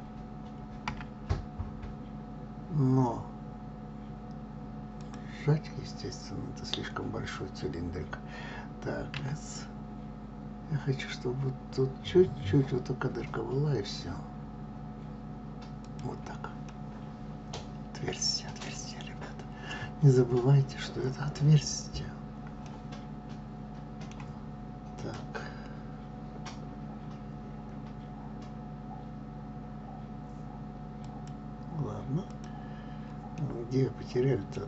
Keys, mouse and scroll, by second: 9.3 s, 16.8-20.0 middle drag, 20.0 scroll down 1, 22.1-22.7 scroll down 1, 22.7-25.0 middle drag, 25.0 click, 31.3 click, 32.4 click, 33.5-34.6 middle drag.